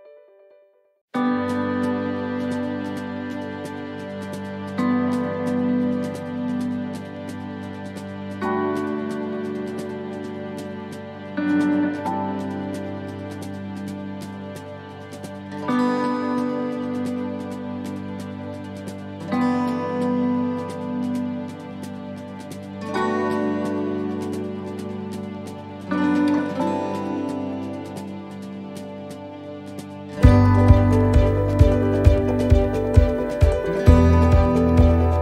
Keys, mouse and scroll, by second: 0.6 right click, 1.6 click, 3.2 middle click, 4.6 click, 6.6 right click, 7.7 shift+right click, 8.8 right click, 9.5 shift+right click, 11.0 click, 13.0 middle click, 14.5 click, 16.9 scroll down 1, 17.5 scroll down 2, 17.7 click, 18.2 click, 21.2-21.7 scroll down 6, 21.9 shift+middle click, 22.7-23.4 scroll up 5, 23.5 shift+middle click, 24.1 middle click, 25.5 right click, 27.5 shift+scroll up 1, 27.5 shift+middle click, 28.1 scroll down 3, 28.4 middle click, 29.6-30.5 scroll down 4, 30.3 middle click, 32.6 right click, 34.0 shift+right click, 34.9 click.